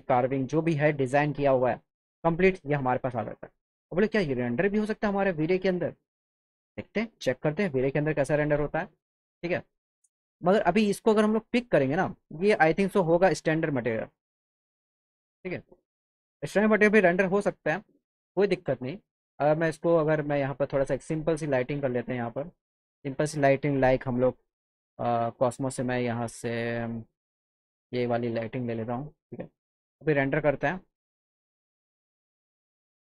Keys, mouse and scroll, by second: 0.7 click, 4.7 click, 5.8 click, 11.4 click, 11.8 click, 12.5 click, 20.4 click, 21.9 middle click, 22.3 alt+middle click, 22.9 click, 25.3 click, 27.5 click, 29.4 alt+middle click, 32.5 click.